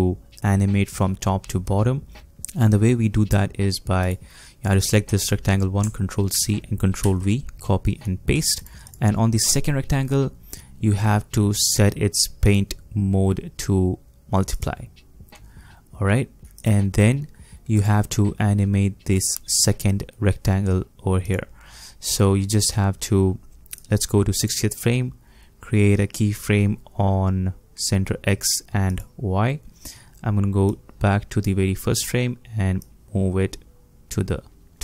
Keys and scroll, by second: 6.3 ctrl+c, 7.0 ctrl+v.